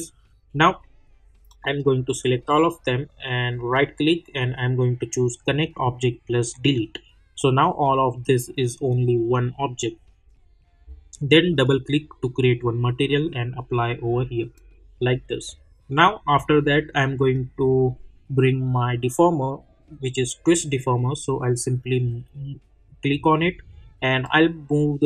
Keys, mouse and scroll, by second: 2.2 shift+click, 3.6 right click, 6.5 click, 11.5-14.5 drag, 17.3-20.1 drag, 22.2-25.0 drag.